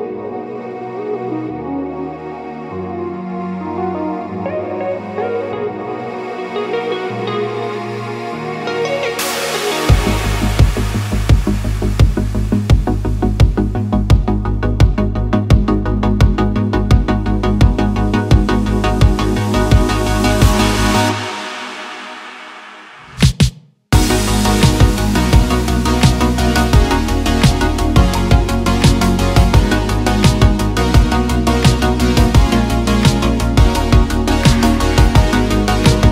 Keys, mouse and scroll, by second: 0.4 click, 1.0 click, 2.6 click, 4.1 click, 4.5 middle click, 4.9 KP_1, 5.5 click, 6.4 middle click, 7.3 e, 7.8 y, 9.6 click, 9.8 middle click, 11.3 click, 11.7 Tab, 12.0 Tab, 12.3 click, 12.8 KP_1, 13.4 shift+click, 15.8 ctrl+r, 17.9 click, 18.2 ctrl+r, 18.9 click, 19.1 ctrl+r, 19.7 click, 20.3 shift+middle click, 20.6 ctrl+r, 21.4 ctrl+r, 22.5 super+z, 22.9 ctrl+r, 24.4 ctrl+r, 25.2 ctrl+r, 26.0 ctrl+r, 27.4 click, 27.5 ctrl+r, 28.5 click, 28.7 ctrl+r, 30.3 ctrl+r, 31.4 ctrl+r, 32.9 ctrl+r, 33.5 ctrl+r, 34.9 Escape, 35.1 Escape, 35.2 Escape, 35.4 super+z, 35.8 click.